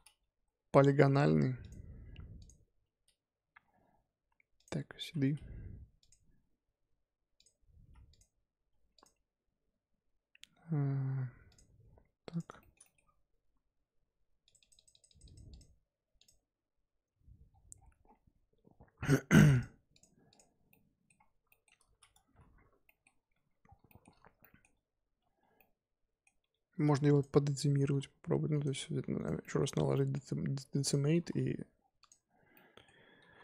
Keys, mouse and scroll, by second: 1.1 g, 2.4 click, 5.0 ctrl+v, 6.0 click, 7.8 x, 8.9 click, 11.8-12.3 scroll up 1, 12.3 click, 12.5-14.3 shift+scroll up 2, 12.6-13.0 shift+middle drag, 14.3 scroll up 1, 14.4-19.3 drag, 19.9 click, 20.3 click, 20.6 scroll up 1, 20.7-21.1 middle drag, 21.1 scroll down 1, 21.1-21.5 scroll up 2, 21.5 shift+middle drag, 21.7-22.1 scroll up 2, 22.1 Tab, 22.7 scroll up 1, 22.8 middle click, 23.3 Tab, 23.6 scroll down 3, 23.8 shift+middle drag, 24.0-24.4 scroll up 2, 24.4-25.0 middle drag, 25.0 Tab, 25.5 middle click, 26.4 1, 27.1 click, 27.7 g, 28.8 g, 29.4-30.8 middle drag, 30.8 click, 31.1 g, 32.5 middle click, 33.1 g.